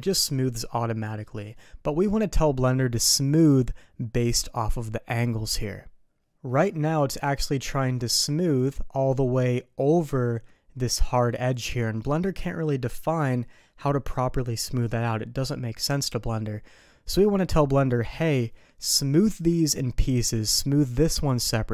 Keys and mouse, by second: 6.4 middle click.